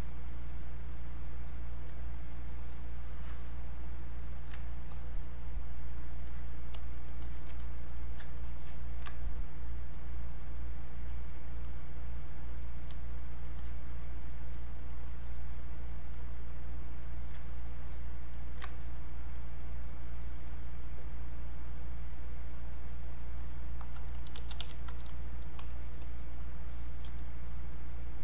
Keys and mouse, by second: 2.2-4.9 ctrl+drag, 4.9 click, 7.6 click, 8.4-10.0 ctrl+alt+drag, 10.0-11.7 drag, 11.7 click, 16.1-18.7 drag, 18.7-20.1 ctrl+drag, 23.4 click, 26.5 click.